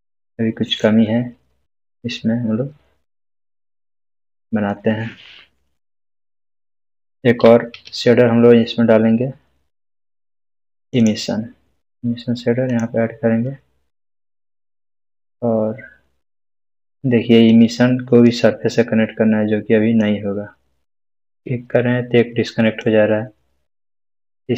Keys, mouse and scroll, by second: 2.3 scroll down 1, 3.8-4.7 middle drag, 7.7 shift+a, 10.9-15.3 drag, 22.8-24.3 drag.